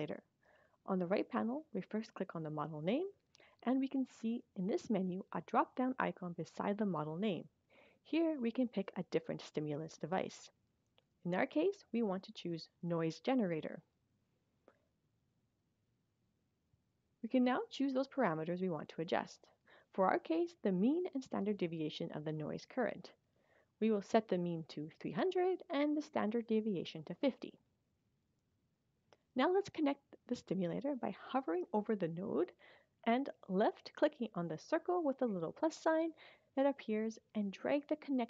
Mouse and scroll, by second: 2.5 click, 6.1 click, 12.8 click, 18.8 click, 20.8 click, 21.8 click, 23.0 click, 25.5 click, 26.8 click, 34.0 click.